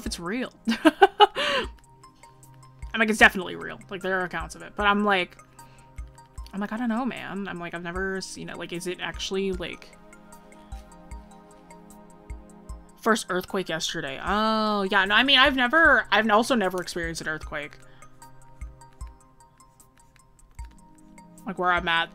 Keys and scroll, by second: 15.7 ctrl+-, 16.2 ctrl+=.